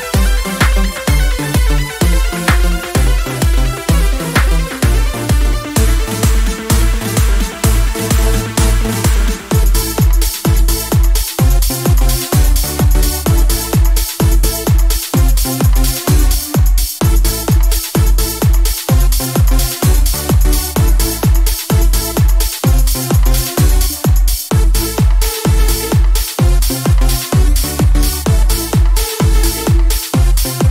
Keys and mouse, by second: 1.2-3.0 drag, 3.0-3.7 middle drag, 4.5-5.7 middle drag, 5.7 click, 6.4-7.3 middle drag, 9.4 right click, 9.8-13.9 drag, 10.6 KP_7, 14.8-16.4 drag, 14.8-15.9 right drag, 16.4 middle click, 17.2 z, 18.9 right click, 19.7 KP_7, 21.5 z, 22.4-23.3 middle drag, 23.3 right click, 24.2 click, 25.3-27.4 drag, 26.1-27.1 right drag, 27.4-27.9 middle drag, 28.8 z, 30.4 a.